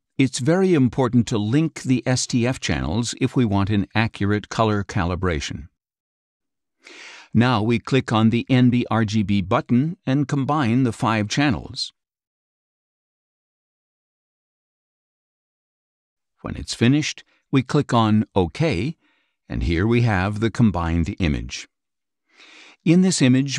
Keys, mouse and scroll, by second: 4.6 click, 10.4 click, 18.6 click, 19.8 click, 20.8 middle click, 20.9-21.4 scroll down 3, 21.1 middle click, 22.0 click, 22.4 click, 22.4 space, 23.4 click.